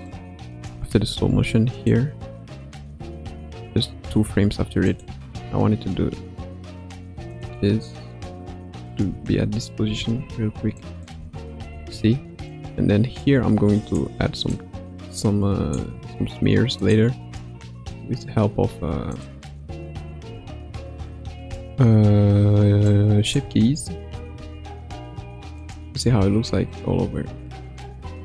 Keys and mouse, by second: 0.0-0.8 drag, 0.8 space, 1.2 space, 1.8-4.0 drag, 5.9 r, 9.0 a, 9.8 i, 10.8 click, 11.2 space, 11.7 space, 12.5 click, 14.5 click, 17.7 r, 20.2 a, 21.4 i, 22.8-23.4 drag, 23.4 space, 24.3 space, 26.0 space.